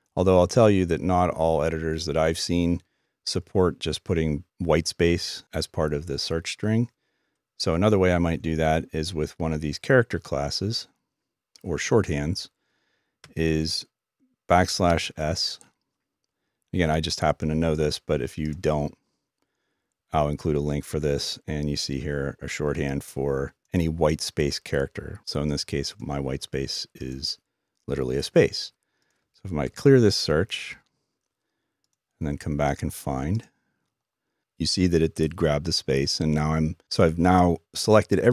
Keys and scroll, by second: 13.6 typing.